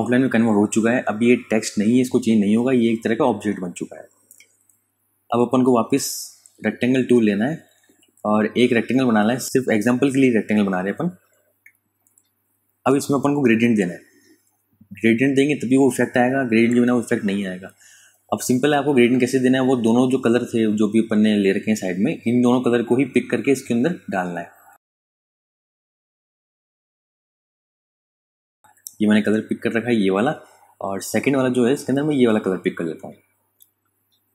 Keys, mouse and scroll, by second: 0.3 ctrl+Num_Lock, 0.3 ctrl+click, 0.6 ctrl+space, 1.0 click, 1.2 space, 2.2 click, 2.4 space, 3.8 click, 5.2 ctrl+KP_Add, 6.5 super+KP_Add, 7.4 super+KP_Subtract, 8.1 space, 8.5 click, 8.7 space, 9.0 ctrl+alt+click, 11.9 space, 12.1 click, 12.5 space, 13.8 click, 16.0 g, 17.4 super+KP_Add, 18.3 super+KP_Subtract, 19.7 click, 22.5 click, 29.8 click.